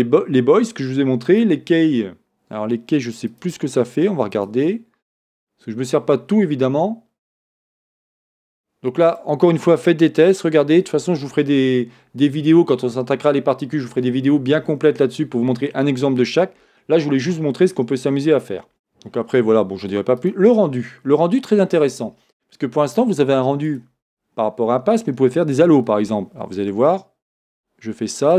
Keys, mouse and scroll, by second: 4.4-9.4 drag, 10.2 click, 17.7 scroll down 1, 20.2-27.6 drag, 20.7-21.2 scroll down 1, 28.2-28.3 drag.